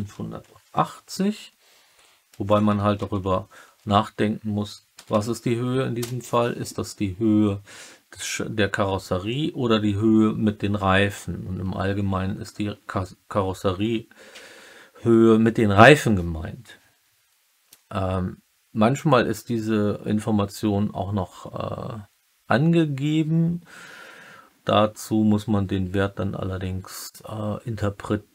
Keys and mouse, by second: 5.0 m.